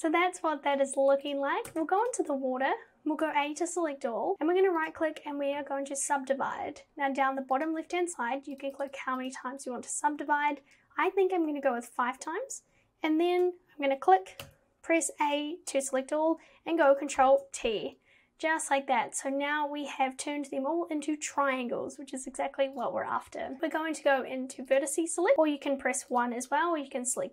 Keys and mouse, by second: 1.7 Tab, 3.2 a, 4.5-6.0 right drag, 7.8 click, 8.8 click, 9.0 click, 9.2 click, 14.5 a, 17.2 ctrl+t, 22.8 click, 26.2 click.